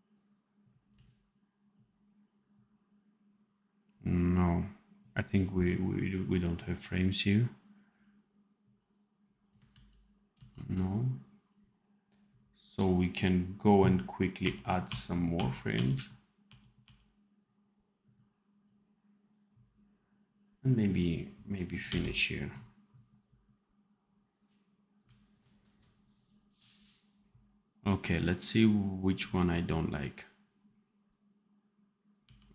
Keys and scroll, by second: 0.8 c, 9.6 ctrl+v, 10.2 ctrl+z, 14.3 r, 21.8 d, 32.1 d.